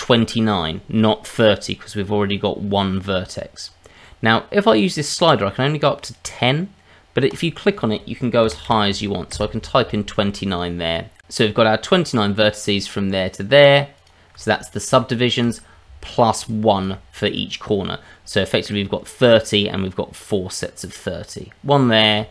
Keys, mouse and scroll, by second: 4.7 click, 7.3 click, 11.2-12.1 scroll up 6, 12.1 click, 13.2 ctrl+click, 13.9 click, 14.4 middle click, 15.0 shift+middle click, 16.3 shift+click, 16.9 shift+middle click, 22.0 click.